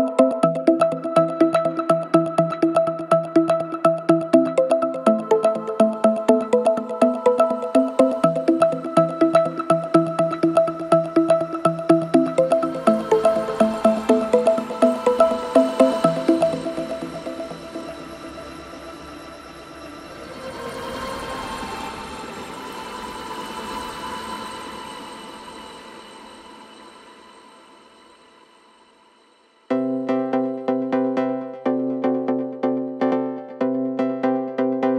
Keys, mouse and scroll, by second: 2.2 click, 3.1 right click, 7.7-8.0 click, 23.3-25.4 drag, 31.0-31.7 click, 33.8-34.3 alt+scroll up 1, 34.4-34.9 alt+scroll up 1.